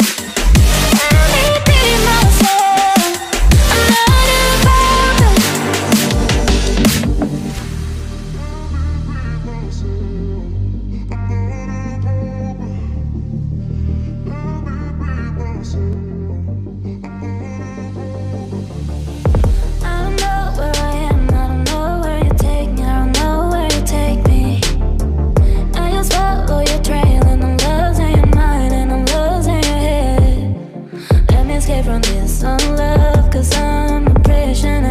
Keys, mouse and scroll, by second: 1.1 right click, 5.9 right click, 6.5 right click, 19.0 typing, 21.7 typing, 23.9 typing, 25.7-26.5 typing.